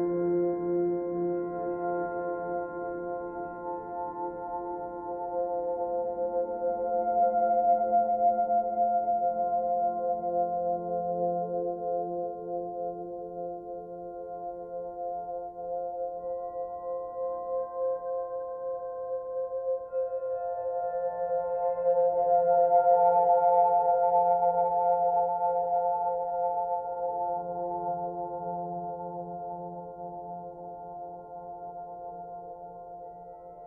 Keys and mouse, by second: 0.0 click, 4.5 click, 6.3-9.9 drag, 11.5 click, 15.4 click, 17.6 click, 18.5 click, 18.9 click, 19.3 click, 20.0 click, 21.2 click, 22.4 click, 25.1 click, 25.6 click, 28.3 click, 29.3 click, 30.9 click, 32.6 ctrl+,.